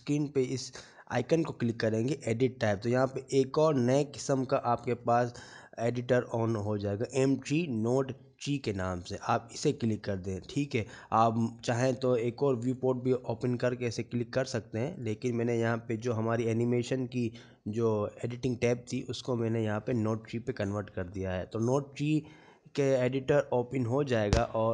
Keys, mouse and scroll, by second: 3.3 click, 14.8 click, 16.9 right click, 20.3 click.